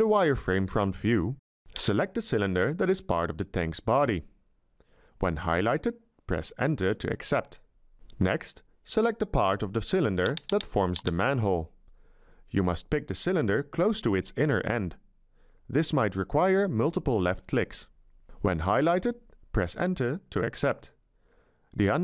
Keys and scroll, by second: 6.6 Return, 19.8 Return.